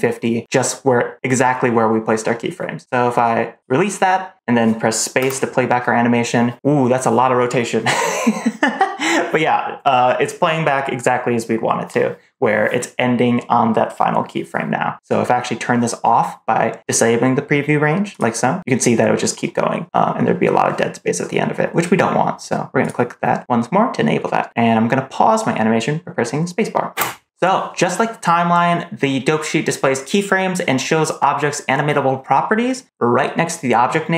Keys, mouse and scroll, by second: 5.1 space, 18.0 click, 22.7 click, 26.8 space.